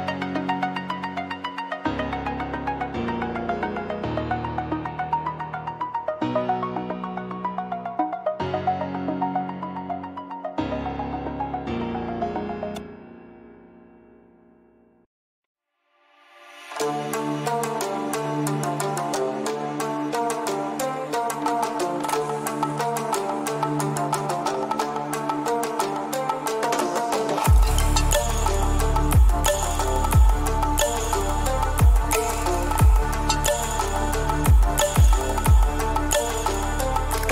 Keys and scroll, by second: 4.3 ctrl+t, 18.3 ctrl+t.